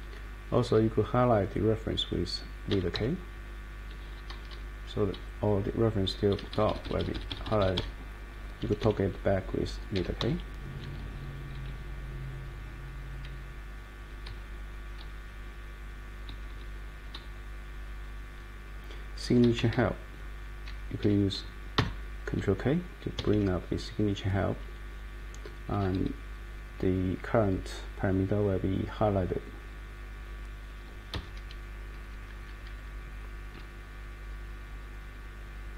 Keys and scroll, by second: 2.4-3.4 typing, 4.3 Down, 5.1-6.2 Down, 6.4 Up, 6.5 Up, 6.7 Up, 6.8 Up, 7.0 Up, 7.1 Up, 7.7 Up, 8.8 Escape, 9.7-10.6 typing, 11.4 Down, 14.2 Page_Down, 15.0 Page_Up, 16.3 Up, 16.5 Up, 17.1-18.0 Right, 19.2 Right, 19.7 Right, 21.0 Escape, 21.7 ctrl+k, 23.1 Escape, 23.3 Escape, 31.1 Up, 32.0 Down, 32.2 Down, 32.4 Down, 32.6 Down, 32.7 Down, 32.9-34.1 Down, 33.5-34.9 Up, 35.4 Up.